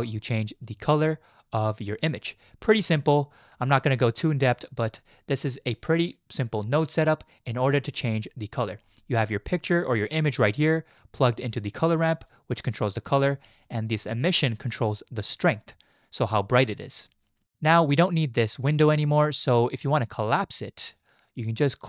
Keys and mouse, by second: 1.4 click, 2.6 click, 3.7-4.6 drag, 5.5-7.6 drag, 8.0 click, 9.2 click, 9.5-10.9 drag, 11.8 click, 13.0 click, 13.6 middle click, 14.0 click, 20.2 click.